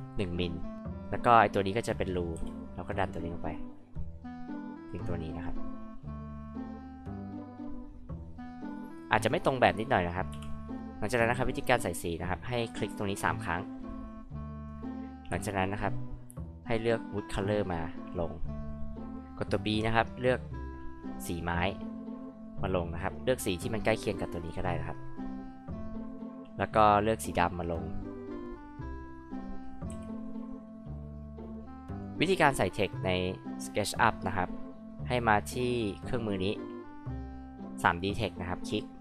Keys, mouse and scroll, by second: 2.4 p, 3.0-5.5 drag, 10.3 g, 10.6 click, 10.8 click, 13.8 click, 14.0 click, 14.2 click, 15.3 b, 17.2 click, 20.5 click, 25.5 click, 26.9-27.8 scroll up 4, 28.0 scroll down 2, 28.1 click, 28.4 click, 29.1 click, 29.9 h, 30.1-30.7 drag, 31.9 click, 35.0 click, 38.6 click.